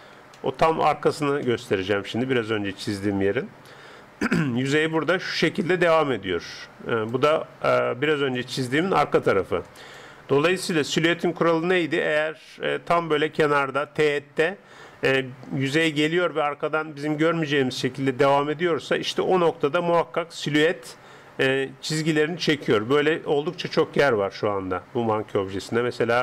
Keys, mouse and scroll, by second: 3.4-4.3 scroll up 1, 3.8-10.1 d, 5.0-11.5 drag, 10.7 KP_0, 12.1-13.7 middle drag, 19.7-20.5 d, 20.5 click, 22.8 d, 23.5-26.2 middle drag, 23.5-26.2 d.